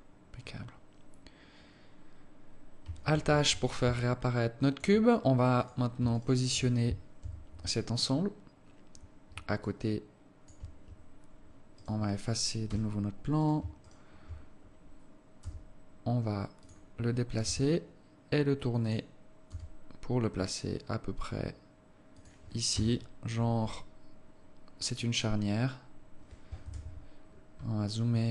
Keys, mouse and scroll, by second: 0.2-0.9 scroll down 5, 3.5 alt+h, 4.3 alt+click, 6.0 right click, 6.5 shift+right click, 7.6 KP_7, 8.4 scroll down 7, 9.0-9.4 scroll up 2, 10.0 alt+shift+click, 12.1 right click, 13.0 h, 13.8 right click, 14.2 shift+right click, 15.8 g, 18.0 r, 20.0 g, 23.1 KP_0, 24.7 scroll down 1, 27.0 KP_7, 27.6-28.3 scroll up 9.